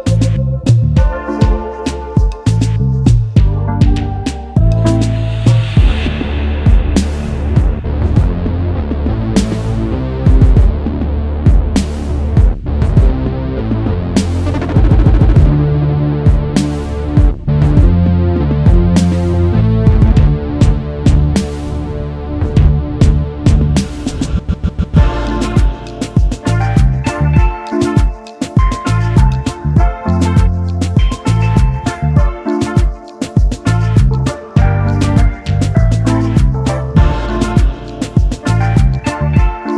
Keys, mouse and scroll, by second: 0.7 shift+click, 1.6 shift+click, 2.8 shift+click, 3.7 shift+click, 5.2 ctrl+g, 6.4 shift+click, 7.3 alt+scroll down 1, 7.8 space, 7.9 double click, 8.7 alt+scroll down 1, 9.1 space, 9.1 double click, 14.3 alt+shift+click, 15.8-16.2 alt+scroll up 1, 17.0 space, 22.4 shift+click, 27.5 alt+shift+click, 30.7 double click, 34.7 ctrl+8, 35.6 double click, 38.0 typing, 39.6 typing.